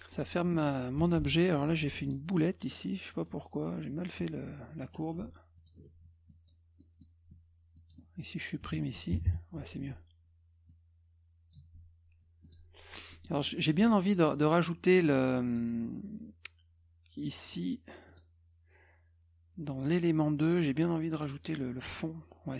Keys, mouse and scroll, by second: 0.1 middle click, 0.5 middle click, 1.0 F2, 1.2 middle click, 1.9 click, 3.3 click, 5.6 ctrl+alt+click, 6.3 click, 6.8 middle click, 7.8 click, 10.7 click, 12.2 F1, 12.5 click, 13.1 middle click, 13.4 middle click, 13.9 F2, 14.1 click, 15.5 click, 18.1 click, 21.2 click, 21.8 click.